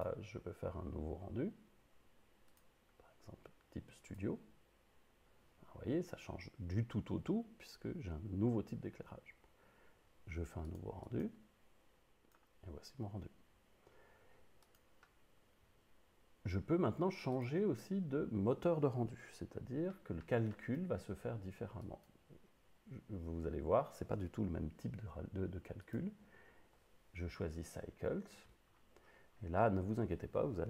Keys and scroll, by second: 19.3 Up.